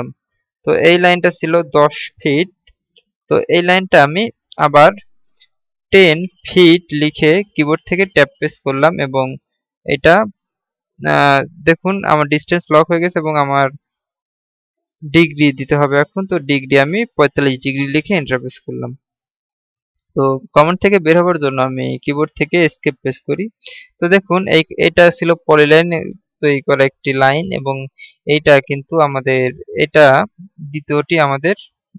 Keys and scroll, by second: 9.1 Tab, 23.6 Escape.